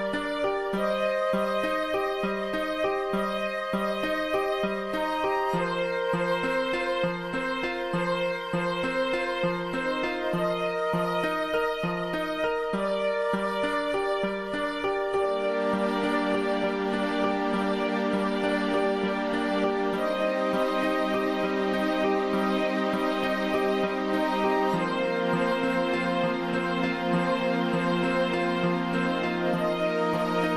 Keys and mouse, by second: 0.9 click, 1.8 click, 2.8 click, 4.1 click, 5.7 click, 6.9 click, 7.8 x, 8.4 click, 11.2 click, 12.7 click, 14.4 click, 16.2 click, 17.6 click, 18.2 click, 21.3-26.4 drag, 28.1-29.9 drag.